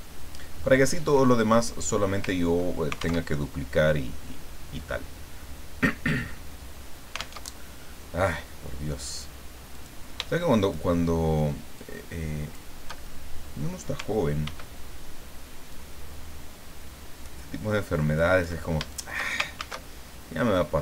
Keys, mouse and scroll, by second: 0.0-0.4 ctrl+scroll down 2, 0.9-1.2 ctrl+scroll down 2, 1.2 ctrl+click, 2.3 ctrl+scroll down 2, 3.2 alt+Tab, 7.4 alt+Tab, 9.7 click, 10.6 shift+click, 11.7 shift+click, 13.2 shift+middle click, 14.5 ctrl+d, 15.7-18.7 ctrl+drag, 18.9 ctrl+shift+click, 19.5 ctrl+shift+a.